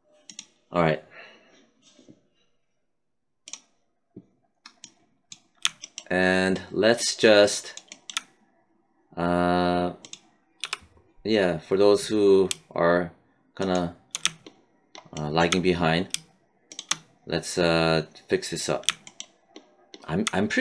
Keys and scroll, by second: 10.6 w.